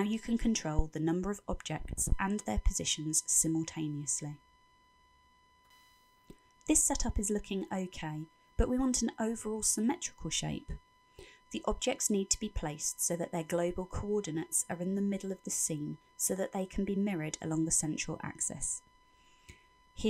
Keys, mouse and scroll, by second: 2.0 click, 8.9 middle click, 17.5-18.8 scroll down 6, 18.8 middle click, 18.8-20.0 scroll down 1.